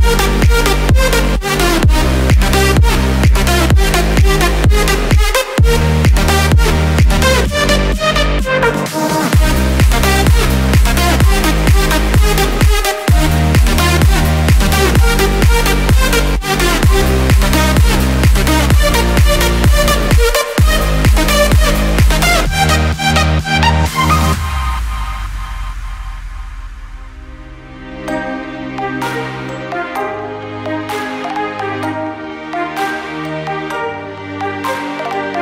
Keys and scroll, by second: 16.2 ctrl+d.